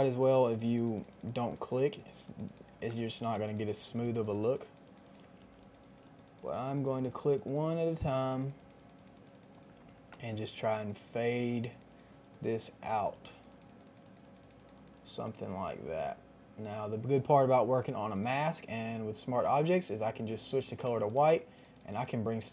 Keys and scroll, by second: 2.9 [, 5.2 ], 9.7 [, 20.8 ].